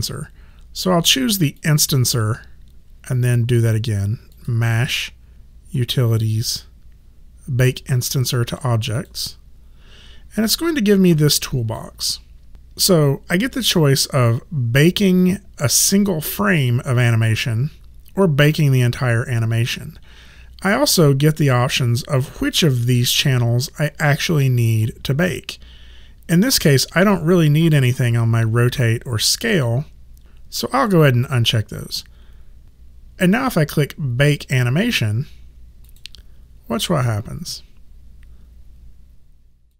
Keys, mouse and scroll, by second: 1.6 click, 4.3 click, 8.9 click, 11.0 click, 30.7 click, 35.8 click, 39.7 click.